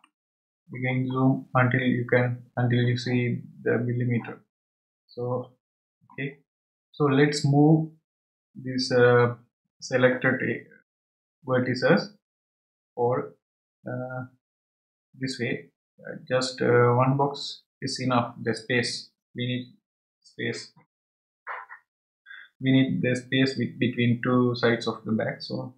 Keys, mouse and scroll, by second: 0.6-1.1 scroll up 6, 1.7 scroll down 2, 5.8-6.3 scroll up 2, 6.5-7.2 scroll up 1.